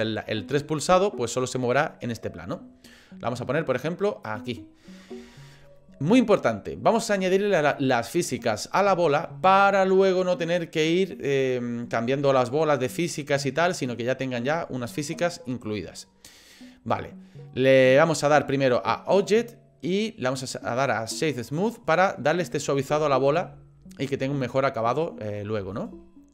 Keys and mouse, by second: 21.5 click, 23.2 shift+middle click, 23.9 click, 25.7-26.3 shift+middle drag.